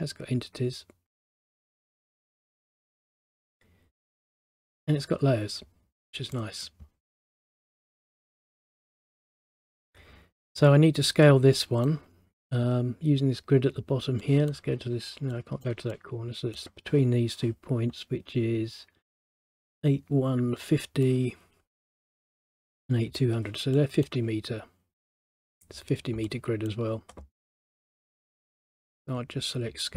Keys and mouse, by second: 1.8 click, 4.1 click, 6.5 click, 8.0 click, 9.3 middle click, 11.7 middle click, 14.3 middle click, 21.2 middle click, 23.9 middle click, 26.4 middle click, 28.7 click.